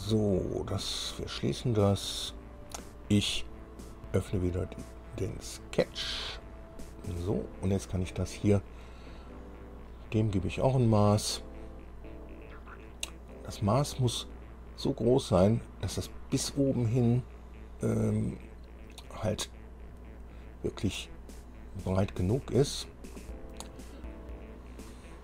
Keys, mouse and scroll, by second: 0.9 click, 3.8-4.1 scroll down 2, 5.5 click, 7.4-7.7 scroll up 1, 10.2 click, 18.2-18.5 scroll down 1, 19.5 scroll up 1, 20.1 scroll up 1.